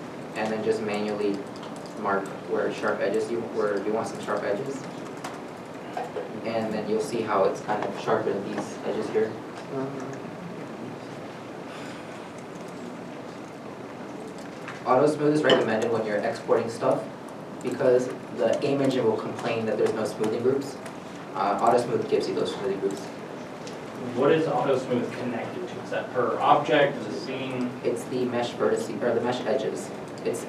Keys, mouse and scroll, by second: 0.3 Tab, 2.0 right click, 4.1 Right, 4.3 alt+click, 5.1 right click, 5.9 Tab, 6.8 middle click, 11.1 middle click, 30.4 middle click.